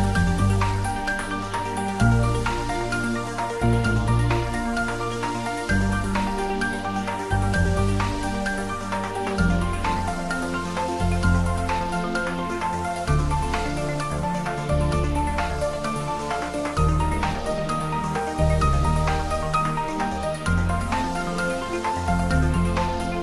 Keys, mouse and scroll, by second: 0.4 click, 1.7 `, 2.6 scroll down 1, 2.9 middle click, 3.5 click, 5.3 click, 9.2 click, 13.8 click, 15.2 click, 16.4 click, 18.0 click, 18.8 scroll down 1.